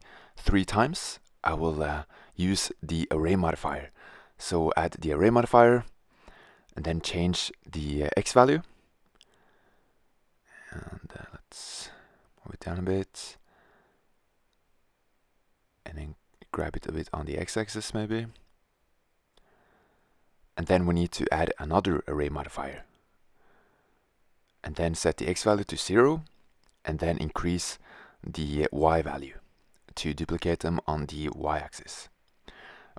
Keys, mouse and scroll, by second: 2.7 Tab, 3.7-4.8 drag, 5.8-6.9 drag, 7.1 middle click, 8.8-10.1 middle drag, 11.2-13.7 drag, 14.3-16.0 drag, 16.0 g, 22.4-23.7 drag, 24.9-26.1 drag, 26.8-28.1 drag, 31.6-32.0 middle drag.